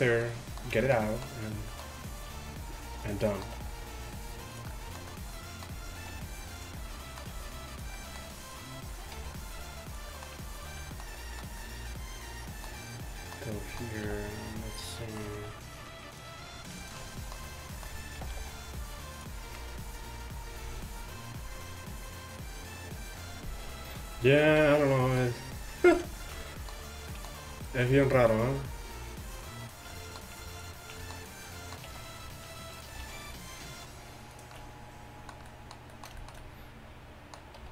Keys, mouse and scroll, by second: 2.3 e, 3.6 e, 6.2 r, 7.4 g, 8.5-9.6 middle drag, 9.2 r, 11.5 middle click, 14.1 e, 15.4 alt+s, 16.9 click, 18.2 g, 24.4 right click, 24.7-28.4 middle drag, 28.4 alt+s, 29.4 middle click, 32.0 e, 33.1 alt+s, 37.6 r.